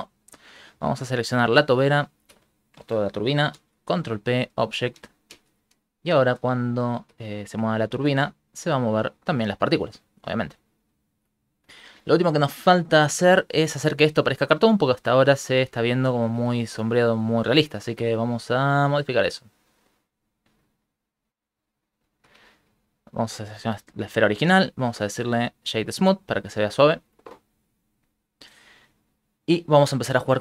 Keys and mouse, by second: 1.3 shift+right click, 1.9 shift+middle click, 3.5 ctrl+p, 5.3 shift+space, 6.9 ctrl+middle click, 8.2 alt+shift+z, 8.8 alt+middle click, 10.5 ctrl+middle click, 10.7 shift+middle click, 11.0 shift+middle click, 11.1 shift+middle click, 12.7 middle click, 13.6 middle click, 14.9 middle click, 15.8 shift+middle click, 15.9 shift+middle click, 16.2 ctrl+middle click, 16.7 shift+space, 18.2 Escape, 18.2 click, 19.9 click, 22.2 shift+middle click, 22.5 ctrl+middle click, 22.9 right click, 24.6 w, 26.5 shift+space, 26.9 shift+space, 28.1 click, 29.8 click, 30.3 click.